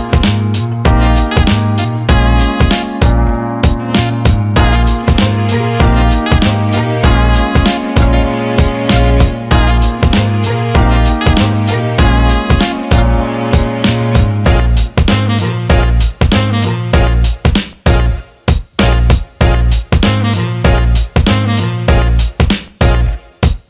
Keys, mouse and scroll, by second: 0.2 alt+middle drag, 0.8 shift+d, 2.0 alt+shift+middle drag, 3.1 click, 4.5-5.6 drag, 6.0 alt+shift+middle click, 7.8 click, 9.5 click, 13.7-15.0 drag, 15.4 Tab, 16.2-17.5 drag, 17.5 Delete, 19.5 click, 20.6 l, 23.2-23.6 alt+middle drag.